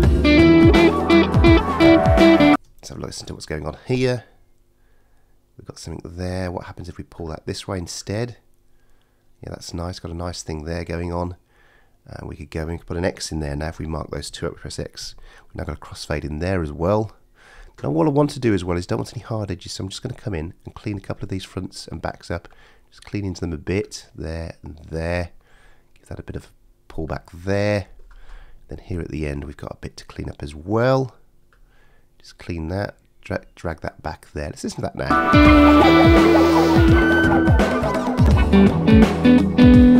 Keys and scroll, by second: 2.5 space, 15.0 shift+x, 35.1 space.